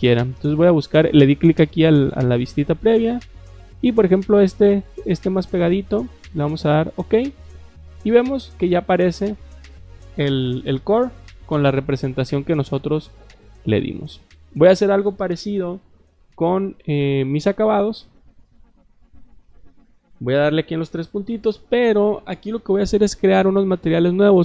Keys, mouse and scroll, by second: 3.8 click, 4.7 click, 6.5 click, 17.3 click, 18.3 click.